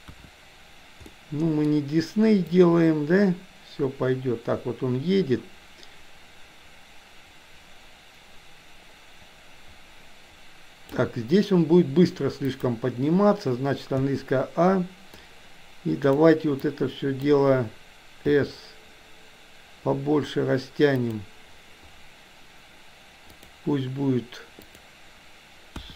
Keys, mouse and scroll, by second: 0.0 KP_1, 1.0-1.5 middle drag, 2.5-10.9 drag, 12.5 click, 13.9 a, 15.2-16.2 drag, 16.7 click, 18.2 s, 23.4 click, 24.7-25.9 drag.